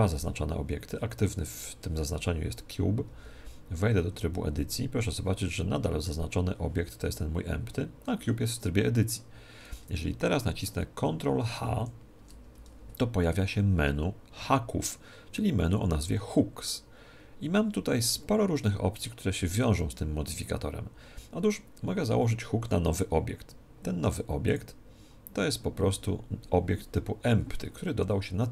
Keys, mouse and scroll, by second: 0.1 z, 3.1 z, 4.0 Tab, 11.7 ctrl+h.